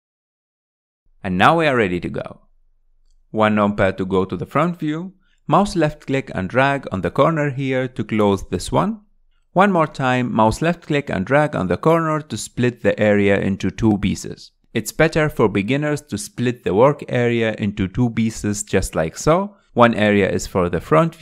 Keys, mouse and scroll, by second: 0.2 click, 2.5 click, 3.1-5.4 middle drag, 5.4 KP_1, 9.7-12.7 drag, 12.9-18.2 drag, 20.4 n.